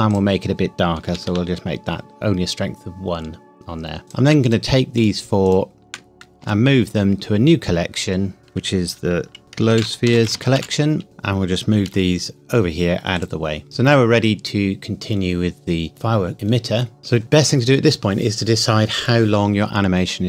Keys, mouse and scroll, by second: 1.1 KP_1, 1.3 KP_Enter, 4.0 click, 4.4 shift+click, 6.4 m, 8.4 click, 9.4-10.5 typing, 11.0-11.9 scroll down 1, 11.9 g, 13.2 click.